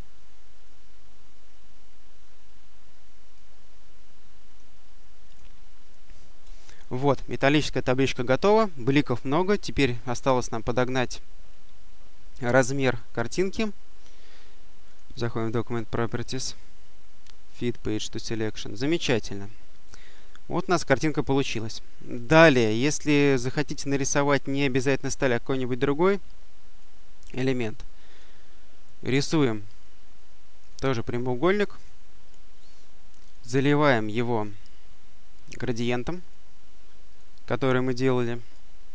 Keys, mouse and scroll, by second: 4.4 click, 5.2 click, 9.5 click, 12.7 click, 14.8 click, 18.5 click, 20.1-27.1 drag, 28.0 click, 29.1-31.0 drag, 31.6 click, 33.1 click, 35.6 click, 37.0 click, 38.8 click.